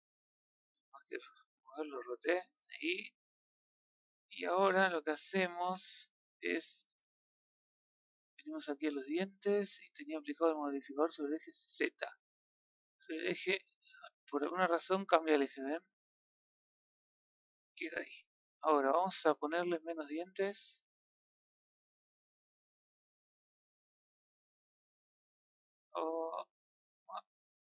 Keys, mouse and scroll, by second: 0.8 click, 2.5-5.7 middle drag, 5.7 Tab, 6.1-8.8 middle drag, 8.8 click, 11.1 click, 12.2 click, 12.8 click, 14.2-17.2 middle drag, 18.5 middle drag, 21.6-27.6 drag.